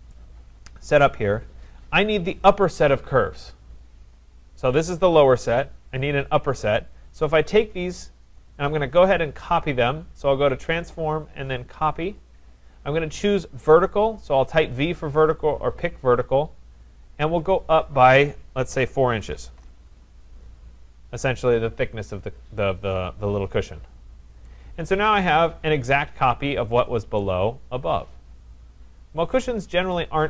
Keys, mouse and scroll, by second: 0.1 right click, 0.3-1.3 scroll, 1.6 scroll, 4.2 scroll, 5.3 click, 6.0 click, 7.5 click, 10.8 click, 12.3 click, 15.3 click, 17.5 click, 18.7 4, 19.4 shift+', 19.5 Return, 22.2 Return, 23.6 click, 25.1 right click, 25.3-26.3 scroll, 27.2 right click, 27.6-29.0 scroll, 29.1 scroll, 29.9 right click.